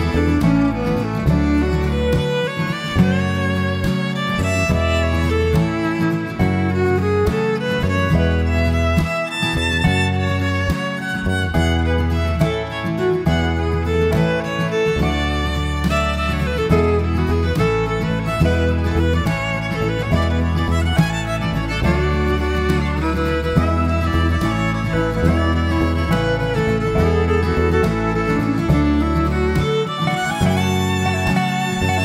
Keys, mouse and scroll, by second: 1.5 shift+middle click, 8.0 click, 8.3 ctrl+z, 8.5 ctrl+z, 9.2 middle click, 9.8-10.3 scroll up 1, 10.6 click, 11.1 click, 11.5 ctrl+click, 12.0 click, 12.4 alt+click, 13.0 alt+click, 14.4 alt+shift+click, 14.9 alt+shift+click, 15.6 middle click, 16.2 alt+shift+click, 16.7 alt+shift+click, 18.6 alt+shift+click, 19.0 alt+shift+click, 20.0 middle click, 22.5 middle click, 24.5 e, 26.0 middle click, 26.9 e, 30.1-31.6 scroll down 3, 30.3 middle click.